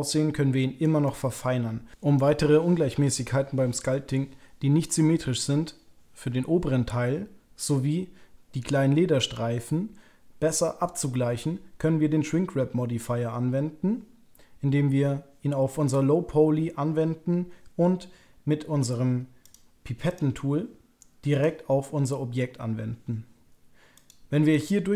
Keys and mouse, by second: 1.0 middle click, 23.9 click, 24.5 click.